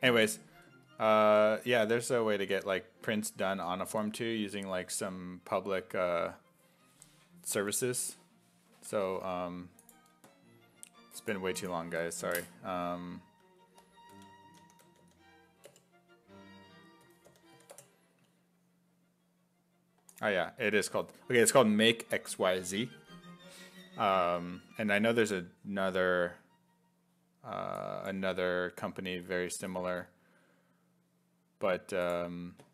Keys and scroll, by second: 1.8 1, 3.3 1, 8.0 alt+Tab, 8.7 alt+Tab, 13.9-15.7 typing, 16.8-18.0 typing.